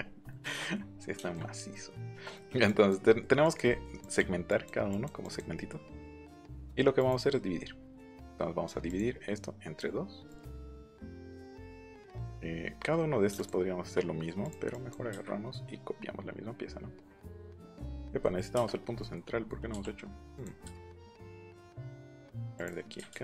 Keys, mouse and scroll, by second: 0.2 shift+middle click, 2.6 click, 3.0 middle click, 3.4 click, 3.6 middle click, 4.0 click, 4.4 click, 4.9 click, 5.1 click, 5.5 middle click, 6.1 click, 6.4 middle click, 6.9 right click, 8.8 click, 10.2 click, 11.1 click, 11.7 click, 13.3 shift+click, 14.4 click, 17.9 middle click, 19.0 middle click, 20.3 click, 20.6 Escape, 21.8 click, 22.5 click, 23.0 ctrl+z.